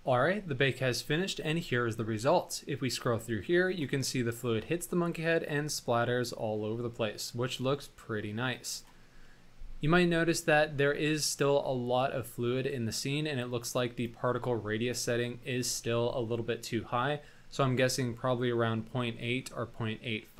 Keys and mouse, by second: 2.5-3.9 drag, 4.1 middle click, 5.6-9.0 drag, 9.3-10.1 middle drag, 10.3 shift+middle drag, 11.7 shift+middle drag, 12.1-13.5 middle drag.